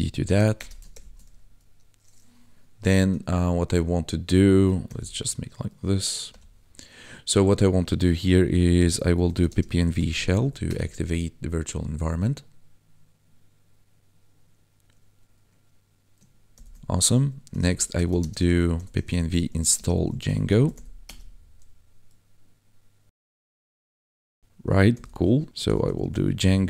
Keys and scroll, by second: 0.0-0.3 typing, 0.5 Return, 0.9 ctrl+l, 4.8 ctrl+l, 6.3 F11, 8.8-10.0 typing, 10.6 Return, 16.5 ctrl+l, 17.4-20.3 typing, 21.0 Return, 24.9 ctrl+l, 25.5-26.6 typing.